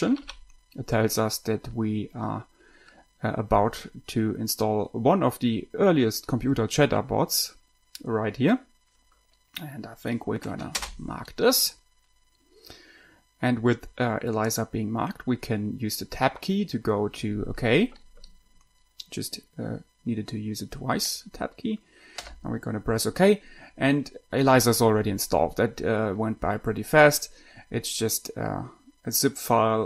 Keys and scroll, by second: 0.3 Down, 0.4 Down, 0.6 Down, 11.1 space, 15.4 Tab, 22.5 Return.